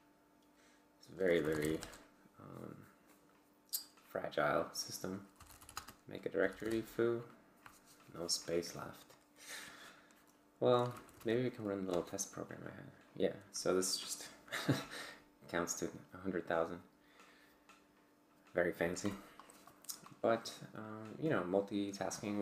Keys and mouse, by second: 0.0-2.1 typing, 5.1-7.0 typing, 10.7-11.7 typing, 11.9 Return.